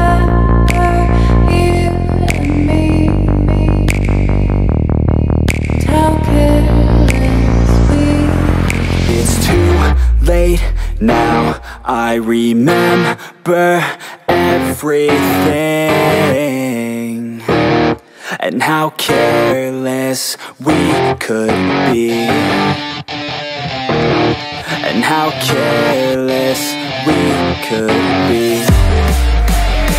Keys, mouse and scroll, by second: 1.0 ctrl+=, 3.2-11.9 drag, 11.9 ctrl+=, 14.1-27.2 drag, 27.2 ctrl+-, 28.7 ctrl+-.